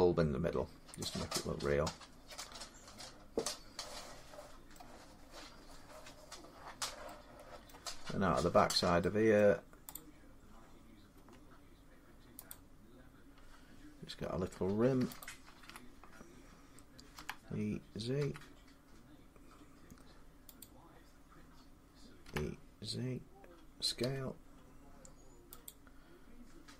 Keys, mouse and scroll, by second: 0.5-1.6 drag, 4.5 middle click, 5.0 middle click, 5.1-6.9 scroll up 3, 7.5 middle click, 7.9-8.2 scroll up 5, 9.2 middle click, 9.3 scroll, 9.7 click, 11.0 Tab, 12.3 click, 15.0 alt+click, 17.0 e, 18.0 z, 20.4 click, 22.1 e, 23.8 s.